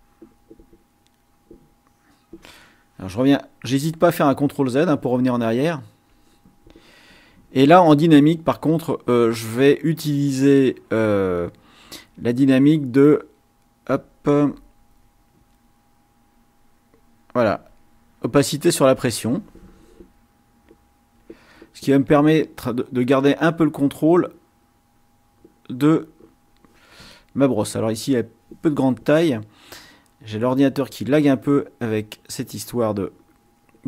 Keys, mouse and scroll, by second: 1.2 click, 3.7 ctrl+z, 5.2 ctrl+z, 8.0 click, 12.0-14.8 drag, 15.0-17.0 drag, 17.8 click, 20.7 click, 21.1 click, 22.5 click, 23.8-25.0 drag, 25.6-26.6 drag, 27.8 click, 29.6 click, 30.8-31.8 drag, 32.0-33.8 drag.